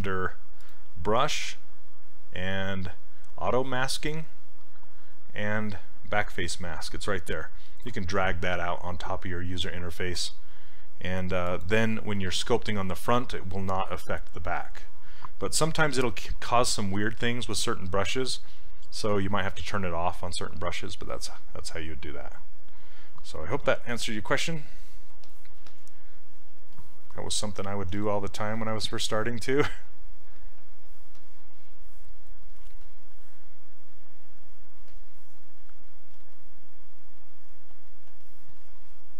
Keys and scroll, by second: 23.9 q, 27.9 s, 36.2 s.